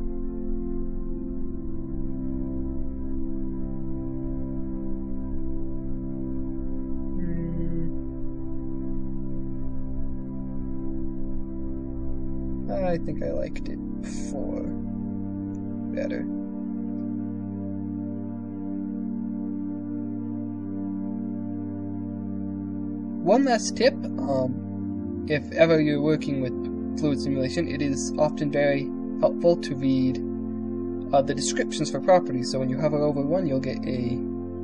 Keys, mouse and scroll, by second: 6.8 click, 12.4-15.3 drag, 19.1 shift+click.